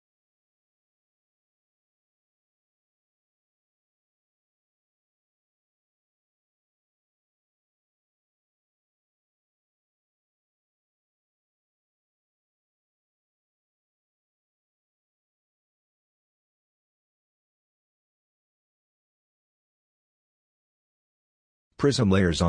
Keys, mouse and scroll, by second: 20.6-21.4 scroll up 1, 21.9 middle click.